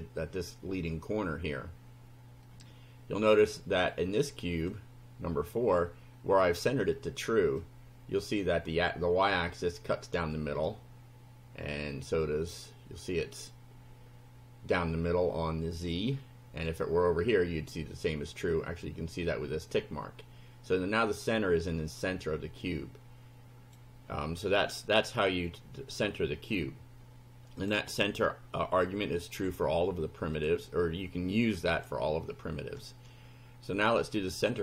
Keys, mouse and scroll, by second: 2.5-3.7 drag, 3.9 click, 7.6-9.0 drag, 10.7-13.6 drag, 15.9 click, 17.6-19.0 drag, 22.6-23.9 drag, 27.6 click, 28.3-29.6 drag, 30.4 click, 31.1 click, 34.0 click.